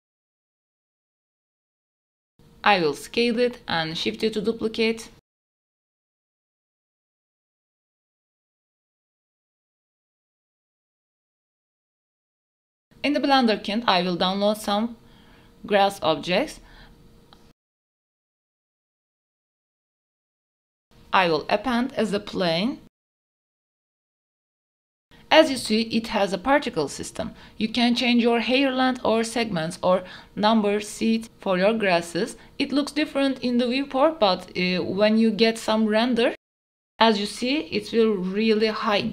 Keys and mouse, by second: 0.0 middle click, 1.0 KP_7, 1.2 s, 1.5 drag, 2.0 click, 2.3-5.8 typing, 3.8 shift+middle click, 4.6 shift+middle click, 5.2 middle click, 6.2 middle drag, 6.7-7.4 shift+middle drag, 7.4 KP_7, 7.6 shift+middle click, 7.9 shift+middle click, 8.0 Tab, 8.3 Tab, 8.4 click, 8.5 Tab, 8.8 2, 9.1 g, 9.2 y, 9.7 Tab, 10.0 click, 10.4 g, 11.1 x, 11.3 shift+d, 11.4 x, 12.0 middle click, 12.6 shift+middle click, 14.3 click, 15.4-17.4 drag, 16.8 s, 18.7 click, 23.1 click, 23.8 s, 24.8 middle click, 25.4 shift+middle drag, 26.1 shift+middle click, 26.8-29.0 drag, 29.7 g, 30.1 z, 31.6 click, 31.6 KP_0, 32.6-33.6 drag, 35.2-36.6 drag.